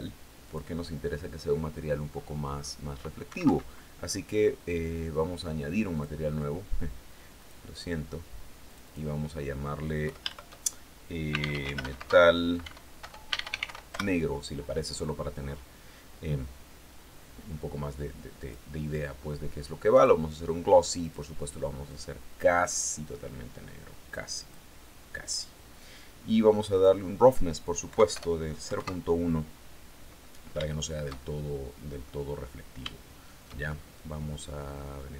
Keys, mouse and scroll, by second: 1.6-2.0 scroll up 1, 2.7 Escape, 5.4 click, 6.8 click, 8.1 click, 9.5 Home, 10.5-13.6 typing, 17.8 click, 19.4 click, 20.4 click, 21.3-24.1 drag, 26.2 click, 27.3 End, 27.6 BackSpace, 28.1 KP_1, 28.2 KP_Enter, 30.1-31.7 shift+middle drag, 32.3 shift+middle click, 32.3 shift+scroll up 2, 33.1 shift+scroll up 2, 33.4 shift+middle click, 33.4-35.1 drag.